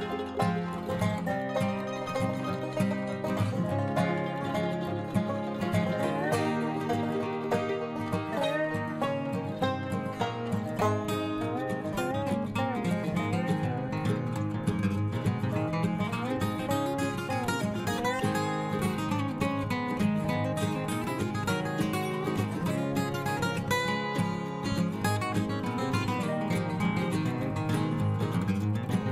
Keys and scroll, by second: 19.6 ctrl+j.